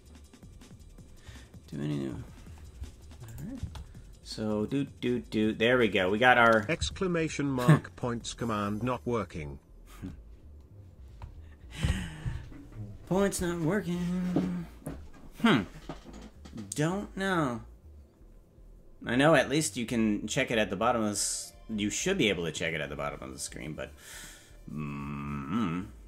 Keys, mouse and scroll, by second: 3.3 click, 3.6 space, 9.6 space.